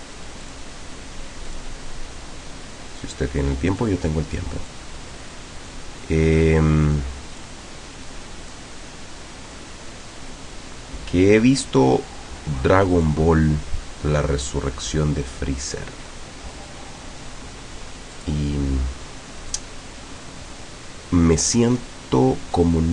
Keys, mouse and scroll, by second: 0.5 click, 1.5 click, 3.8 click, 4.7-7.7 drag, 8.6-13.3 drag, 16.6 click, 18.2 click, 19.6-21.6 drag, 22.6-22.9 drag.